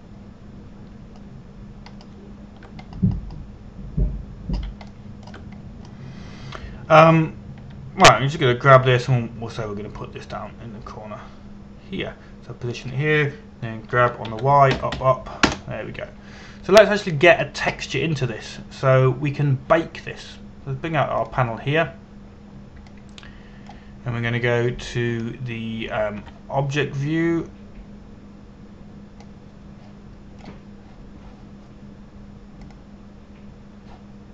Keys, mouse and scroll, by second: 2.6-3.8 scroll down 1, 4.6-5.5 scroll up 1, 6.0-6.3 scroll down 1, 6.5 shift+middle click, 7.3-9.7 scroll down 1, 9.7 g, 14.3 click, 15.6 g, 15.9 y, 16.4 Up, 17.1 Return, 18.3-20.9 scroll down 1, 22.9 click, 27.9 Tab, 30.9 click.